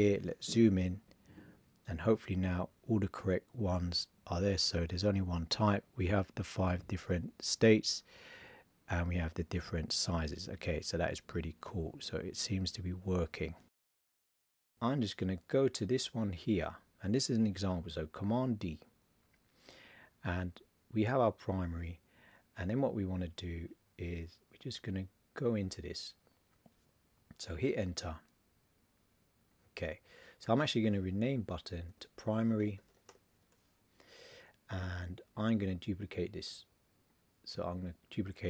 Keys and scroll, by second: 18.4 super+d, 31.9 shift+p.